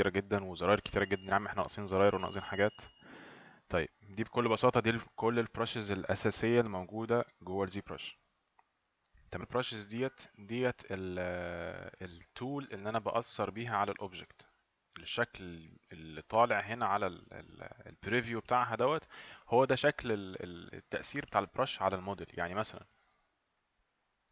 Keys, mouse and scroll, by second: 9.4 click, 23.7 click.